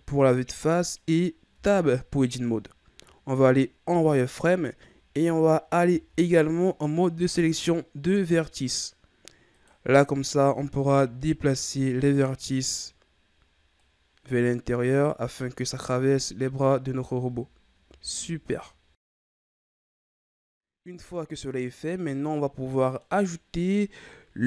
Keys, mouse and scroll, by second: 1.0-1.5 scroll up 1, 1.5 Tab, 3.3-3.9 scroll up 1, 3.9 z, 5.9 ctrl+Tab, 9.6 right click, 10.5 b, 13.8-16.4 drag, 16.4 z, 17.2 Tab, 17.8 a, 18.3-19.1 scroll down 3, 19.1-22.1 middle drag.